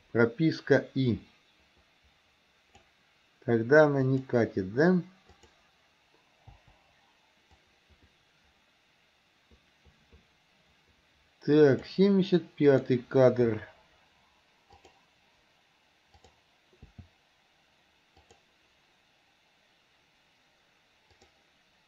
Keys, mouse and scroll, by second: 1.2-2.9 drag, 4.1 click, 5.4 click, 6.6 Delete, 7.7-12.0 drag, 12.7 click, 14.8 click, 16.2 click, 16.9 g, 21.2 click.